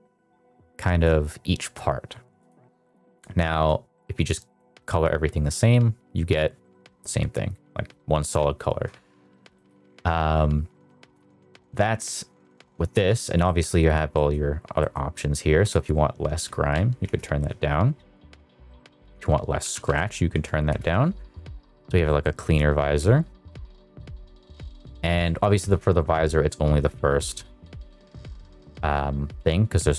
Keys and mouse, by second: 2.3 click, 3.9 click, 9.6 middle click, 10.9 middle click, 13.4 middle click, 14.1 middle drag, 14.8 middle click, 15.6-17.1 drag, 19.1-20.7 drag, 22.0 middle click, 22.3 shift+middle click, 23.5 middle click, 24.0 middle click, 24.5 middle click.